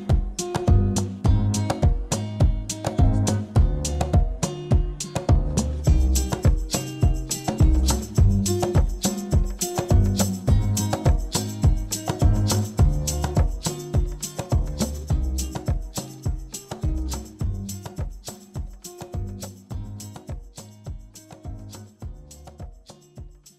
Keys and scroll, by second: 5.6 ctrl+z, 7.1 z, 8.4 F9, 9.5 ctrl+c, 11.4 ctrl+v.